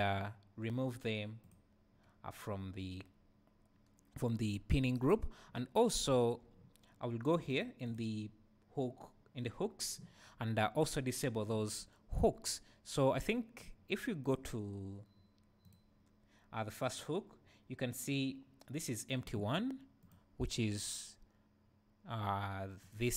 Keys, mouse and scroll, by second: 1.4 click, 4.9 Tab, 5.2 `, 7.5-10.1 drag, 13.1 click, 14.2 click, 15.6-16.8 drag, 20.0 click, 22.8 click.